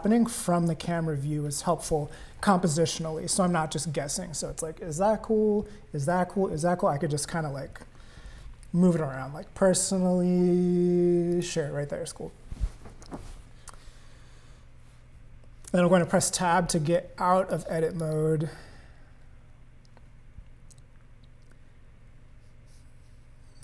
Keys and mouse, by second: 15.7 Tab, 16.9 click, 17.9 click.